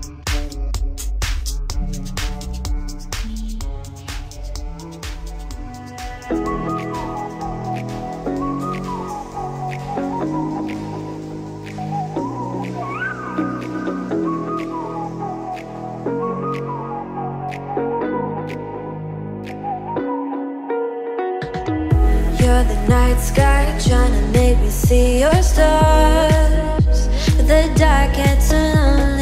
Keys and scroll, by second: 0.7 space.